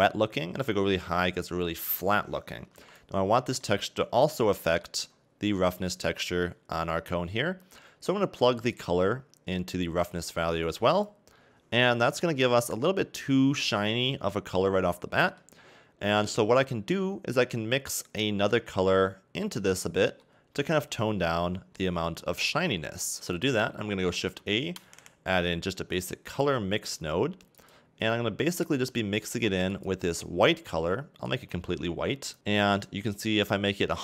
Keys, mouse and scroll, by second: 8.8 click, 12.2-13.1 scroll up 2, 13.1 scroll down 1, 13.3 middle click, 15.7-17.5 scroll up 1, 17.5 click, 21.2 middle click, 22.5-22.8 scroll down 2, 22.8 middle click, 23.2-25.2 scroll up 1, 31.3 click.